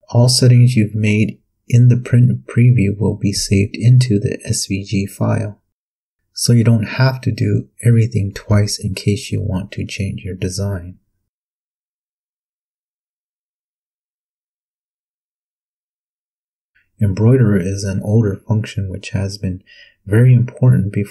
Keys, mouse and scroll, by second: 1.4 click.